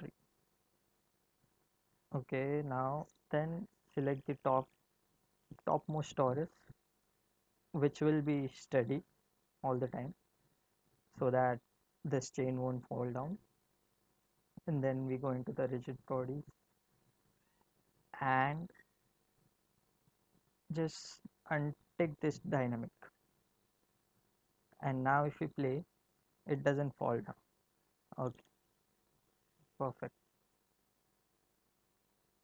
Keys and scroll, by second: 25.7 space, 28.5 space.